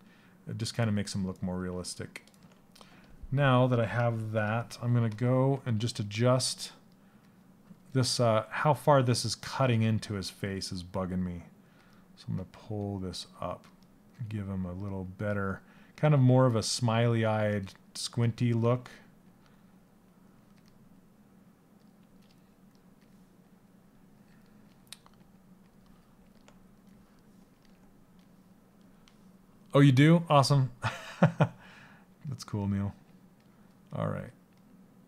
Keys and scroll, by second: 5.1 s.